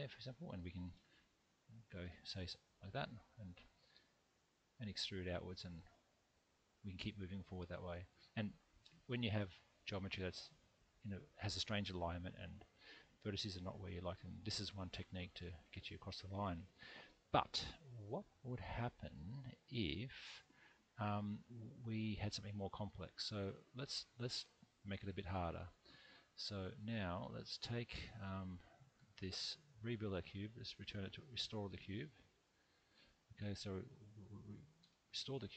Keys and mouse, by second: 0.9 shift+KP_1, 2.0 shift+KP_3, 4.0 e, 5.1 click, 5.8-8.4 middle drag, 14.9-16.5 middle drag, 21.2 1, 21.8 middle click, 23.3 x, 25.2-26.8 middle drag, 27.8 click, 28.7 shift+click, 29.6 m, 30.9 middle click, 32.1 click, 32.7 shift+click, 33.5 m.